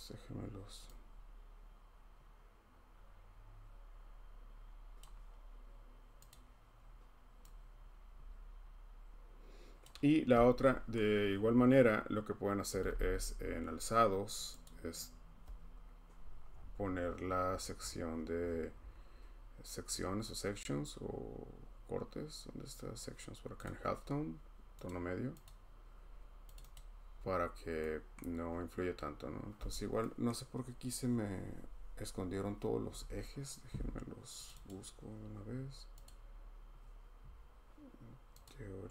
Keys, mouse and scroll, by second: 5.0 click, 6.3 click, 9.8 click, 10.9 scroll, 12.5-13.4 typing, 12.8 scroll, 14.7 click, 16.2-18.8 scroll, 19.8-21.3 scroll, 23.6 click, 25.0 click, 25.4 click, 26.5 click, 26.7 click, 27.1 scroll, 28.1 scroll, 29.0 middle click, 29.6 middle click, 30.3 middle click, 34.3 scroll, 34.4 click, 34.6 click, 36.0 click, 37.4 scroll, 38.4 click.